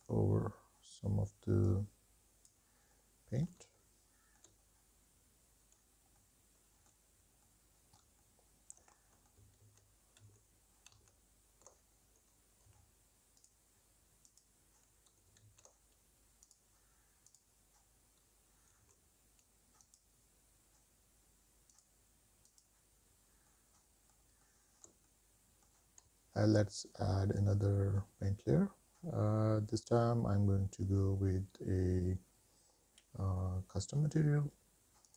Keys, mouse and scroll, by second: 2.0 click, 3.4 middle click, 4.0 shift+middle click, 4.8 middle click, 5.2 middle click, 5.9 ctrl+z, 6.1 ctrl+z, 6.3 ctrl+z, 6.6 scroll down 2, 6.8 f, 7.4 click, 7.8 ctrl+z, 8.1 click, 8.9 x, 9.3 click, 9.9 click, 10.2 click, 10.5 middle click, 10.9 shift+middle click, 11.1 middle click, 11.4 f, 12.1 click, 12.6 click, 13.2 middle click, 13.5 middle click, 13.7 middle click, 13.9 shift+middle click, 14.1 middle click, 14.3 shift+middle click, 14.5 middle click, 15.1 click, 15.3 click, 15.7 click, 16.0 middle click, 16.4 shift+middle click, 16.6 middle click, 17.1 shift+middle click, 17.4 middle click, 17.7 shift+middle click, 17.9 shift+scroll down 1, 18.4 click, 18.8 click, 19.1 click, 19.3 middle click, 19.4 scroll down 2, 19.6 middle click, 20.0 scroll up 2, 21.2 click, 21.5 click, 21.8 click, 22.2 middle click, 22.7 shift+middle click, 23.1 middle click, 23.4 shift+middle click, 23.7 middle click, 23.8 scroll down 3, 24.0 middle click, 24.1 shift+middle click, 24.6 middle click, 27.8 scroll up 3, 30.0 click.